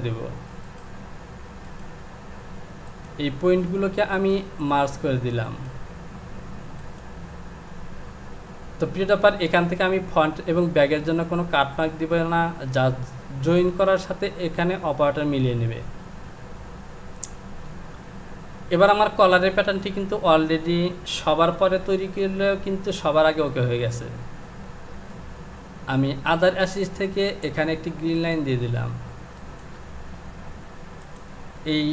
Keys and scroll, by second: 17.7 j, 21.4 Home.